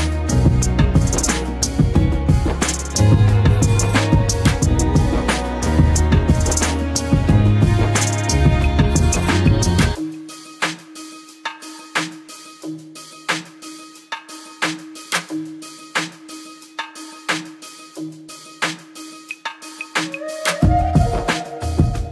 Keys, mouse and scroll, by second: 1.0 ctrl+z, 2.6-4.7 shift+drag, 8.5 click, 10.4 Tab, 11.9-15.1 drag, 20.9 ctrl+BackSpace.